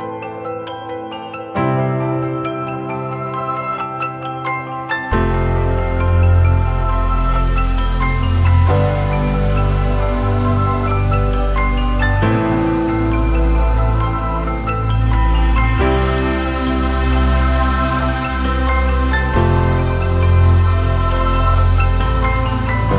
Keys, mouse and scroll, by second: 21.0 ctrl+t, 21.9 alt+shift+click.